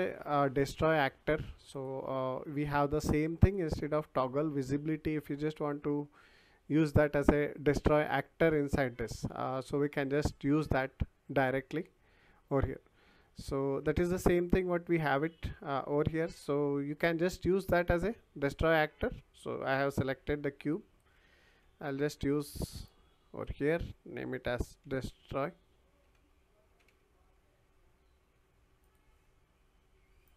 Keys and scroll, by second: 14.6 Delete, 19.8 Delete, 21.5 Delete, 24.8 s, 26.0-27.4 typing.